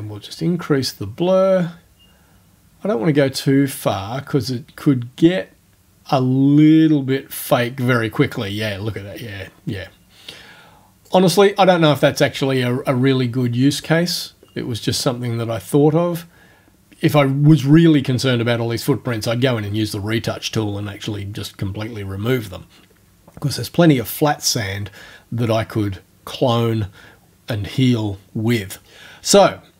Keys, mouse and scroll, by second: 0.3-11.2 drag, 13.7 click.